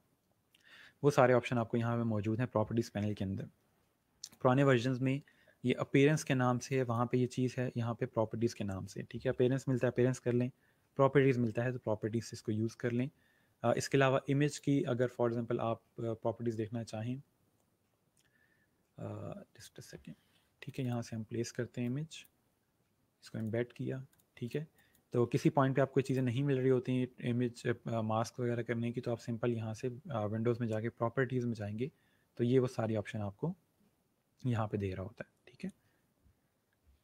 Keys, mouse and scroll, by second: 4.3 click, 6.7 click, 15.9 click, 19.5 click, 35.6 click.